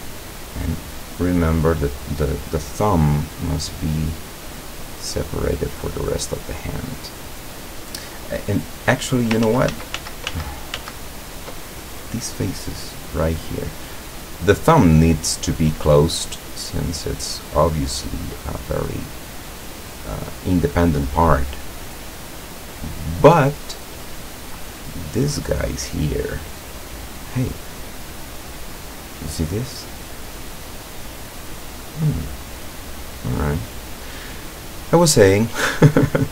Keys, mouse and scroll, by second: 2.2 scroll down 1, 2.5 click, 3.3 click, 4.3 click, 4.7-7.9 drag, 8.7 scroll down 1, 9.5 ctrl+z, 13.9 click, 15.7-16.2 scroll up 1, 16.3-18.2 drag, 18.4 click, 21.9 right click, 22.4-24.8 drag, 24.9 scroll down 2, 26.6 right click, 26.9 right click, 27.4-29.6 middle drag, 29.9-30.2 scroll down 2, 30.4 middle click, 31.4 middle click, 31.9-32.5 middle drag, 32.8-33.4 scroll up 1, 34.2-34.5 scroll down 1, 34.9-36.0 middle drag.